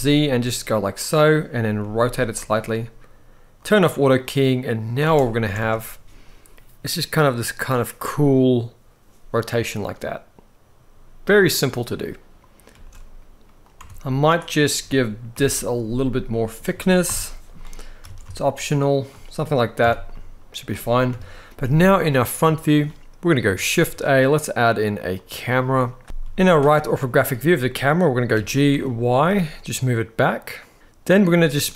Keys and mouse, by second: 0.7 click, 1.5 r, 2.1 click, 4.0-4.8 drag, 4.8 space, 5.3 alt+a, 11.4-11.7 middle drag, 12.4 space, 13.5 Tab, 15.0 ctrl+l, 16.8 ctrl+l, 17.8 alt+s, 18.7 shift+click, 19.5 Tab, 19.8-20.8 middle drag, 20.8 KP_1, 22.3 shift+middle click, 23.5 shift+a, 26.0 KP_3, 26.0 z, 28.1 g, 28.4 y, 30.7 click, 30.7 z, 31.1 middle click.